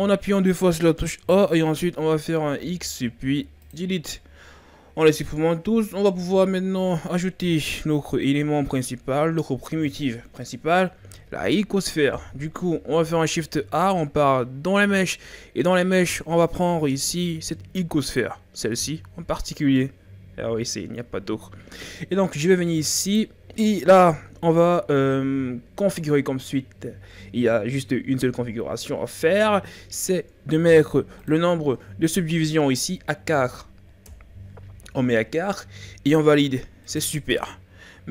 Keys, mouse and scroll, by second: 2.6 x, 6.3 KP_1, 8.1-10.7 ctrl+scroll up 2, 13.1 shift+a, 23.0-26.3 drag, 31.2-34.2 drag, 36.3-36.8 scroll up 6, 36.8 right click, 37.6-38.1 ctrl+scroll down 3.